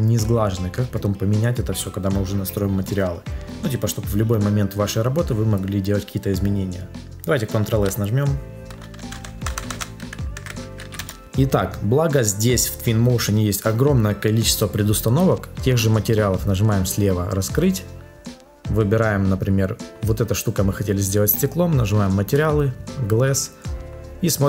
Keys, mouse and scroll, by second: 7.6 ctrl+s, 8.9 BackSpace, 10.9 Return.